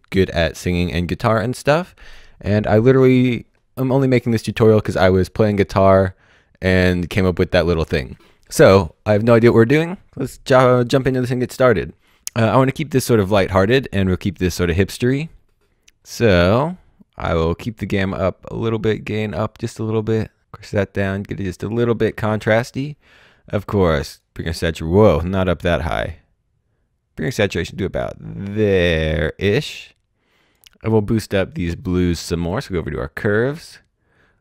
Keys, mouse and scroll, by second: 17.1 scroll up 1, 18.2-19.3 scroll up 1, 19.9-21.3 scroll down 1, 21.3-22.5 scroll up 1, 23.9 click, 25.7 click, 32.4 click.